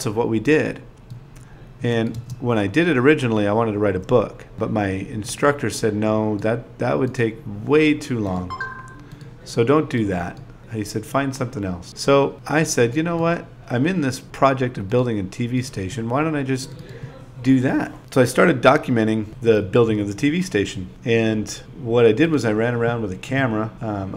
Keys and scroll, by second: 0.9 super+v, 2.9 shift+t, 3.4 0, 5.4-8.0 typing, 11.3 BackSpace, 15.8-19.4 typing, 22.4 BackSpace.